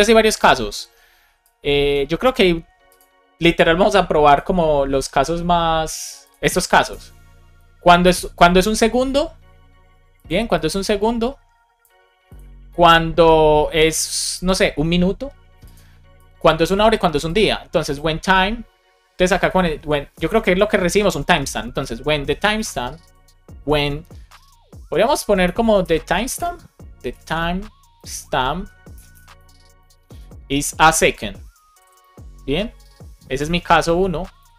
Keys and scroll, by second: 25.3 BackSpace, 25.8 space, 28.9 BackSpace, 29.7 space, 30.2 space, 30.7 space, 32.7 Right, 33.1 space, 34.1-34.5 typing.